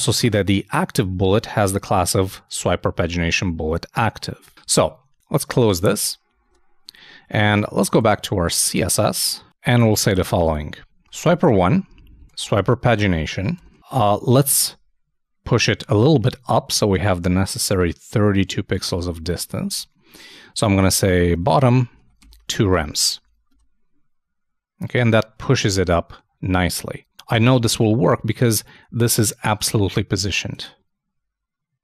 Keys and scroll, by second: 6.4 super+Tab, 15.7 super+Tab, 19.3 super+Tab, 21.6-22.4 typing, 23.2 super+;, 23.3 super+s, 23.5 super+Tab.